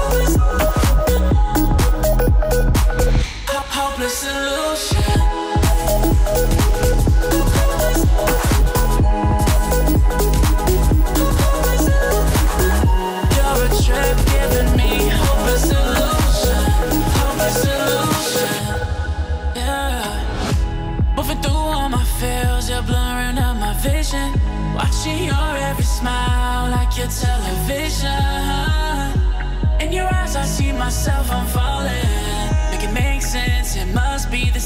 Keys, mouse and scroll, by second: 2.2-2.7 alt+scroll down 1, 2.7-3.2 alt+scroll up 1, 3.4 click, 6.0 alt+scroll down 1, 6.8 alt+scroll up 1, 7.9 click, 8.3 alt+scroll down 2, 8.4-9.3 alt+scroll up 2, 9.3 click, 11.3-11.8 alt+scroll down 2, 11.8-12.5 alt+scroll up 2, 12.5 click, 13.7-14.4 alt+scroll up 2, 14.4-15.0 alt+scroll up 1, 15.8 click, 18.6-19.5 alt+scroll down 1, 19.5 alt+scroll up 1, 19.8 alt+scroll down 1, 20.6 click, 22.8 F7, 23.9-24.3 click, 25.3-26.9 shift+drag, 27.6-32.2 drag.